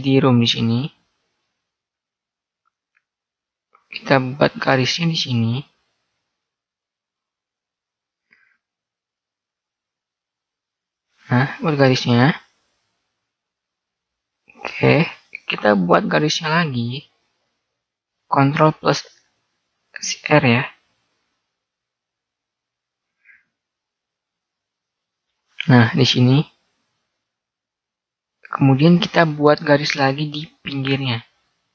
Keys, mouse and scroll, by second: 5.0-7.6 right drag, 6.5 a, 7.6 ctrl+r, 16.2 shift+r, 22.6 ctrl+r, 31.3 ctrl+r.